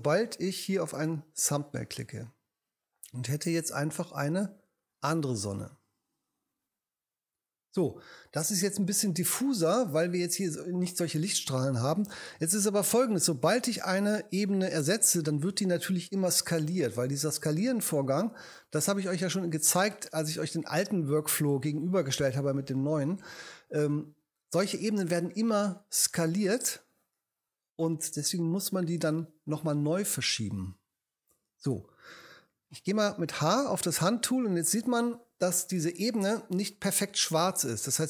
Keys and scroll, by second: 15.5 v, 33.5 h.